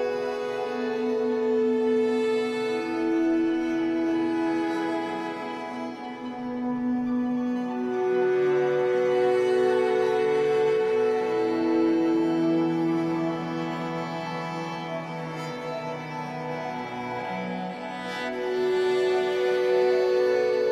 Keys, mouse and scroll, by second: 2.1 ctrl+z, 4.0 ctrl+r, 6.3 click, 8.3 f, 9.8-11.7 middle drag, 10.5 ctrl+r, 11.7 click, 13.1 f, 15.0-18.1 shift+middle drag, 16.8 scroll up 2, 18.1 click, 19.0-20.7 middle drag, 19.9 ctrl+r.